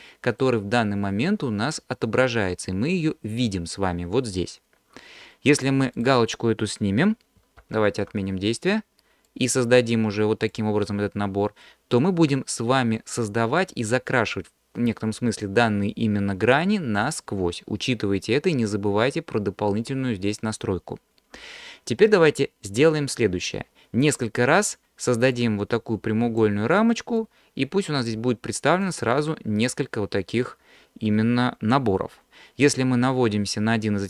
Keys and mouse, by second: 6.0 click, 7.7 ctrl+z, 9.4-10.6 drag, 11.6-16.5 middle drag, 16.5 alt+click, 25.5 click, 27.2 click, 28.8 click.